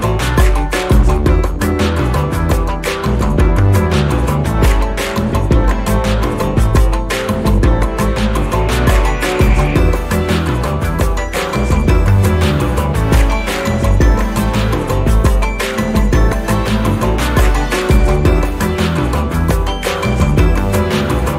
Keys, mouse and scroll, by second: 0.6 click, 5.5 click, 9.2 click, 10.3 click, 11.6 click, 13.1 click, 14.9 ,, 15.1 KP_2, 15.7 KP_Enter, 17.4-18.9 drag, 19.7 shift+click, 21.0 click.